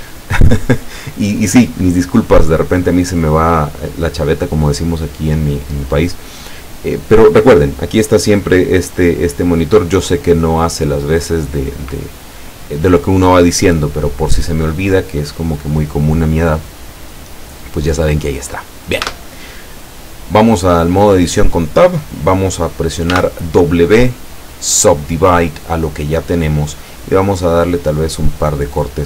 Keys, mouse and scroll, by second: 23.2 w, 24.8 click, 27.7 click, 28.3 click.